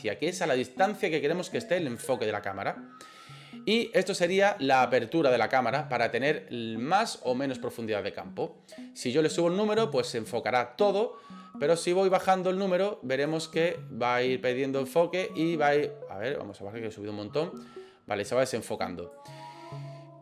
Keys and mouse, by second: 9.2 click, 12.2-13.3 drag, 13.7-19.2 drag.